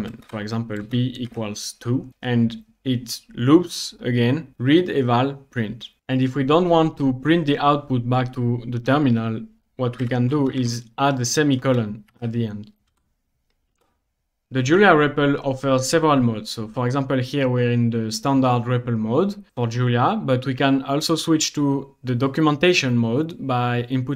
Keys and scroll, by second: 0.0-0.2 typing, 1.3 typing, 2.1 Return, 10.1-12.9 typing, 13.8 Return.